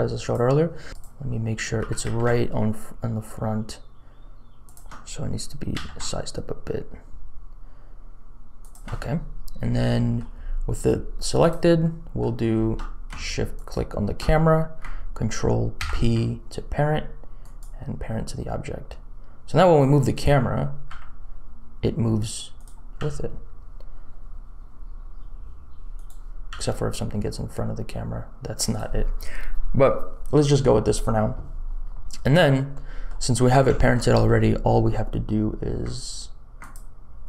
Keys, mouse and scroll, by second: 0.0 click, 0.9 click, 0.9 KP_1, 1.7 g, 5.7 s, 10.0 click, 11.4 click, 12.0 click, 13.5 shift+click, 15.7 ctrl+p, 20.8 r, 22.9 r, 23.3 click, 23.5 middle click, 26.4 r, 32.7 middle click, 33.5 middle click, 33.9 middle click, 34.2 middle click.